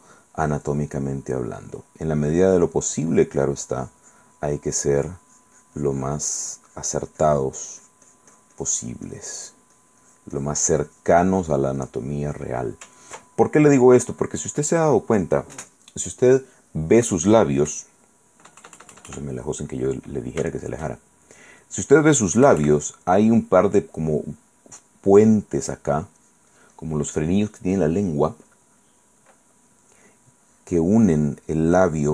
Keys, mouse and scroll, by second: 0.2 ctrl+middle click, 0.5 ctrl+click, 1.2 ctrl+middle click, 2.8-4.5 drag, 4.9-9.9 drag, 12.5 click, 13.1 ctrl+click, 13.2-14.3 ctrl+middle drag, 14.9 click, 17.9 KP_Add, 19.5 middle click, 19.8 click, 20.7 shift+click, 21.3 shift+click, 21.4 shift+middle click, 21.5 click, 21.9 click, 22.6 KP_Add, 23.1 click, 24.4 click, 26.4 click, 30.0-31.9 drag.